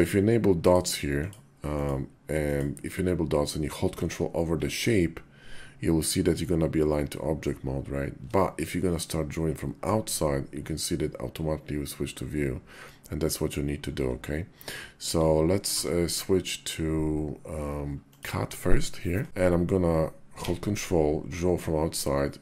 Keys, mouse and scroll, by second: 0.4 click, 0.9 click, 1.6 click, 14.8 KP_5, 15.4 d.